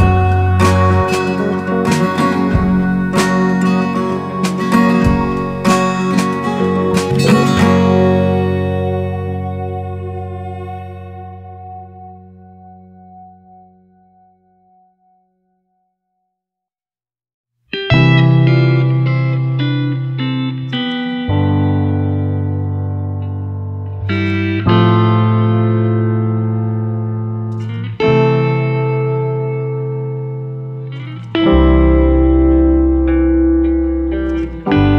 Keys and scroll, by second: 1.8 ctrl+c, 2.0 ctrl+v, 30.3 Down.